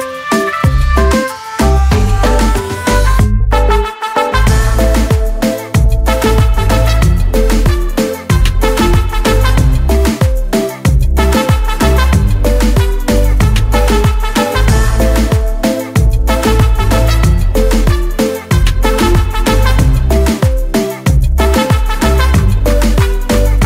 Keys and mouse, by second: 0.0-0.9 typing, 3.2 click, 15.1 click, 19.8 click, 22.6 ctrl+d.